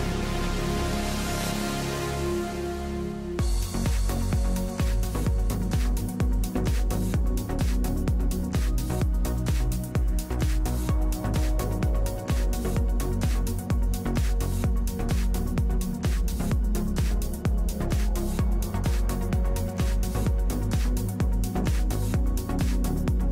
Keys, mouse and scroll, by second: 0.7 ctrl+r, 3.8 click, 4.0 a, 4.7 ctrl+r, 10.2 click, 12.1-13.9 drag, 14.7 ctrl+Tab, 16.4 KP_7, 17.2 z, 18.3 z, 19.8 Delete, 20.3 Down, 22.6 ctrl+Tab.